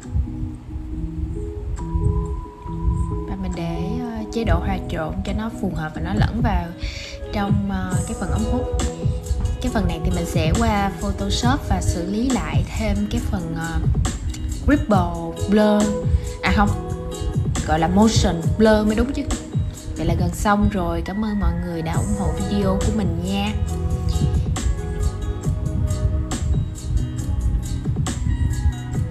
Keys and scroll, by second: 2.8 super+z, 14.7 super+z, 15.1 super+z, 16.0 shift+super+z.